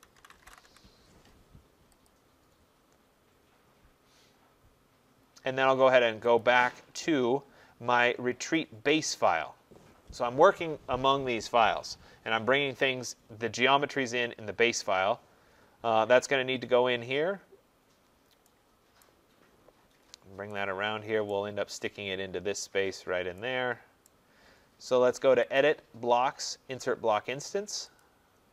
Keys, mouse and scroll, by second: 0.0-1.2 typing, 2.1 click, 6.5 click, 8.1 click, 9.3 click, 13.4-14.1 scroll, 14.6 middle click, 14.7 middle click, 14.8 middle click, 15.5 middle click, 15.6 middle click, 16.7 middle click, 16.8 middle click, 16.9 middle click, 17.4 middle click, 18.0 middle click, 18.1 middle click, 19.1 right click, 19.5 middle click, 19.6 middle click, 19.7-20.1 middle click, 20.0 middle click, 21.3 right click, 21.8 middle click, 21.9 middle click, 22.3 middle click, 22.4-22.8 middle click, 22.7 middle click, 24.1 right click, 25.6 click.